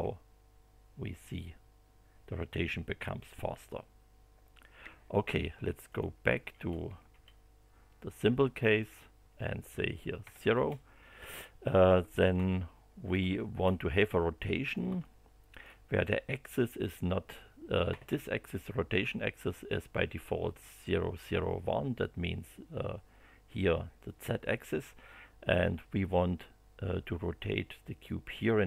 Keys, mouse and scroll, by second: 5.9 click, 6.5 BackSpace, 8.8 click, 9.2 BackSpace, 10.2 0, 10.5 Return, 12.4 shift+middle click, 13.6 shift+scroll up 3, 14.0 middle click, 15.0 shift+middle click.